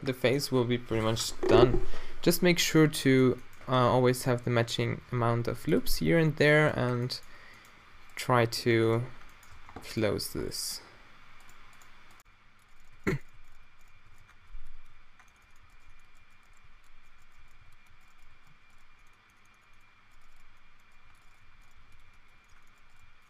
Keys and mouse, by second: 5.0 ctrl+r, 8.5 q, 9.6 Tab, 10.3 Tab, 12.2-18.2 typing, 14.3 Tab, 14.4 Tab, 15.2 Tab, 15.4 Tab, 15.6 middle click, 18.0 right click, 21.0-23.2 typing.